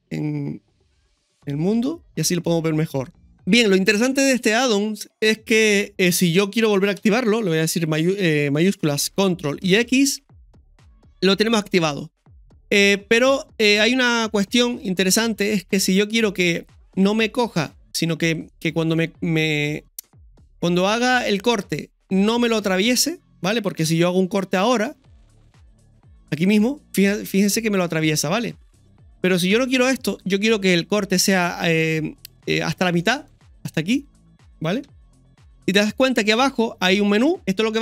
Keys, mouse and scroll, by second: 2.2 scroll down 2, 2.5 middle click, 4.2 scroll down 1, 4.8 middle click, 4.8 scroll down 1, 7.0 KP_1, 9.6 ctrl+shift+x, 18.5-37.8 middle drag, 23.8 KP_1, 29.5 KP_1, 34.8 KP_1.